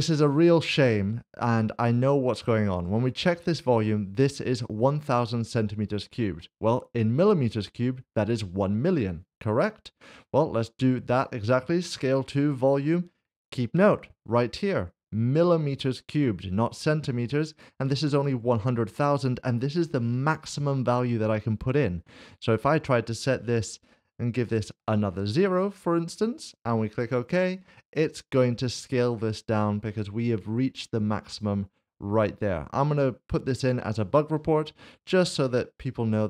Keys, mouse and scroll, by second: 2.7 click, 12.5 click, 18.0 click, 22.6 click, 24.5 d, 26.4 click, 31.3 click.